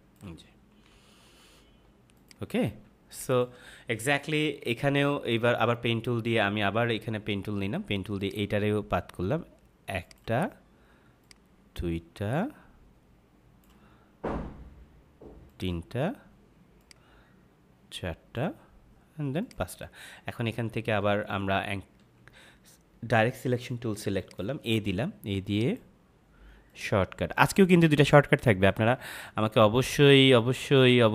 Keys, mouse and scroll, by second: 1.4 -, 2.1 click, 2.8 space, 3.0 click, 3.2 space, 4.3 ctrl+=, 8.1 click, 22.2 a, 24.1 click.